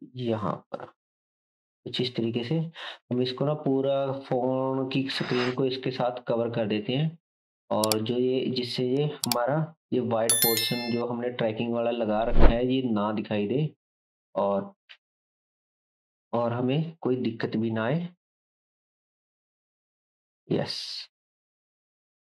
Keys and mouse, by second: 2.5 click, 3.2 shift+z, 4.6 g, 10.4 click, 11.4 g, 17.3 g, 20.8 g.